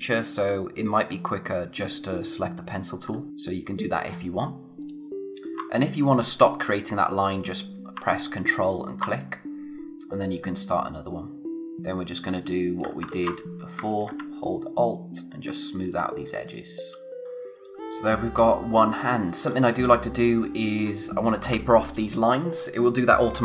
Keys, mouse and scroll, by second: 10.1 click, 11.5 scroll, 12.1 click, 13.1 ctrl+z, 13.8 shift+click, 14.3 alt+click, 18.4 space, 18.5 click, 18.9 space, 19.4-19.9 scroll up 1, 19.9 space, 20.0 click, 20.4 space.